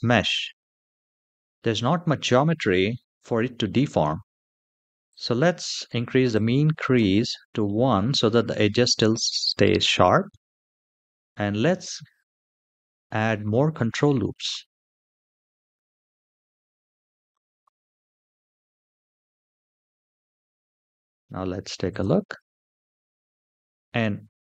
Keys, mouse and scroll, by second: 0.3 a, 0.9-1.8 scroll up 2, 1.8-3.1 middle drag, 1.8 scroll up 1, 4.8 click, 6.0 click, 7.4 middle click, 9.7 middle click, 10.4 shift+middle click, 10.9 middle click, 12.4 ctrl+r, 16.6 ctrl+r, 19.8 middle click, 20.3 a, 21.0 Tab, 21.1 shift+middle click, 21.6 click, 22.1 space, 23.7 space.